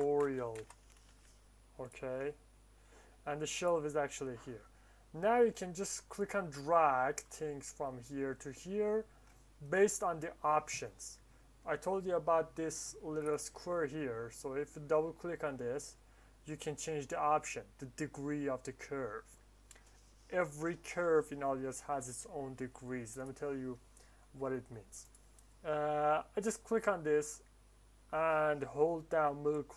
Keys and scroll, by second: 0.0-1.0 typing.